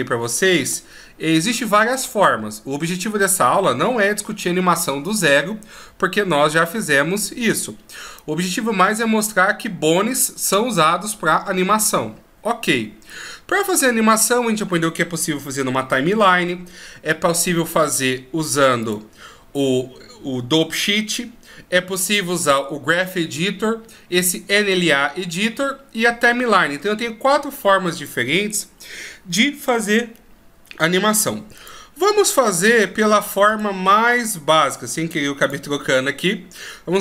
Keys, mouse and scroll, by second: 0.8-1.3 shift+scroll up 1, 1.3 shift+scroll down 1, 2.5-2.9 ctrl+scroll down 1, 2.9-4.5 ctrl+scroll up 2, 18.8 click, 35.5 click.